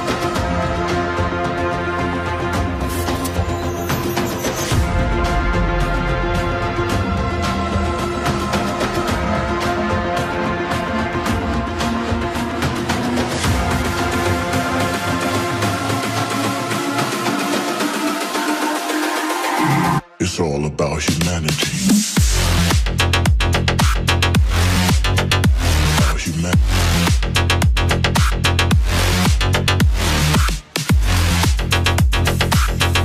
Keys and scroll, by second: 17.2 BackSpace, 22.9 BackSpace.